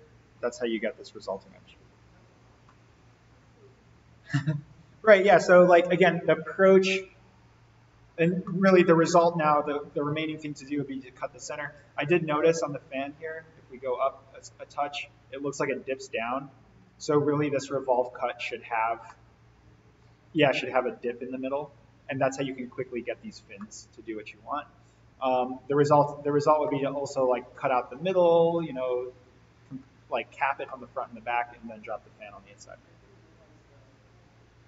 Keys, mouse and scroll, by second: 2.1 alt+v, 2.5-5.1 middle drag, 8.1-8.4 scroll down 1, 8.4-9.0 middle drag, 12.1 click, 12.3-13.3 scroll up 1, 14.1 click, 18.9-19.3 scroll down 1, 19.3-20.0 middle drag, 23.3 scroll up 1, 23.5-25.3 middle drag, 30.6-31.3 middle drag.